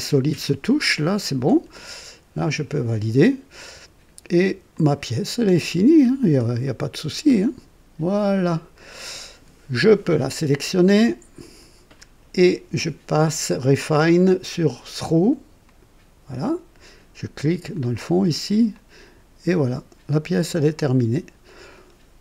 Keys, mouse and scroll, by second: 0.4-2.0 drag, 2.7 click, 3.5-4.6 drag, 4.7 click, 6.1 scroll up 1, 6.6 right click, 7.4-9.1 drag, 10.2-10.6 scroll down 1, 11.4 click, 14.4 click, 15.6 click, 16.3 click, 17.7 click, 18.7-21.9 drag.